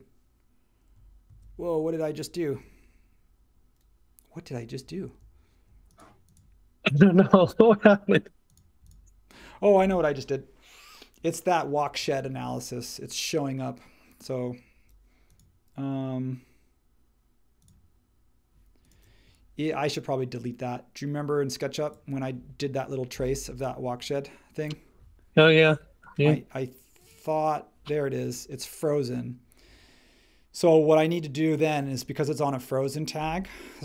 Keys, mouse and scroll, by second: 1.3 super+z, 2.5 space.